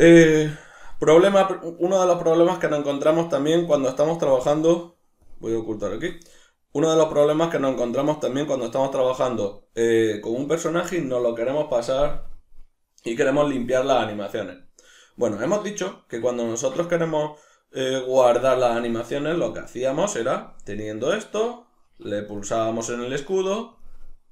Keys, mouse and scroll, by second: 4.3 drag, 5.3 drag, 5.9 shift+click, 6.5-8.5 middle drag, 8.5 click, 9.5-19.4 middle drag, 19.4 click, 22.0 Escape, 22.3 click, 23.1-24.3 drag.